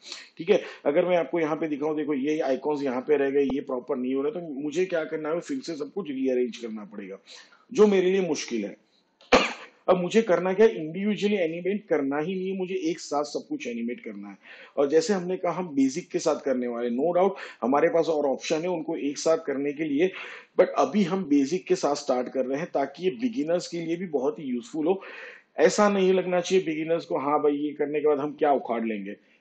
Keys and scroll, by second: 11.2 ctrl+z.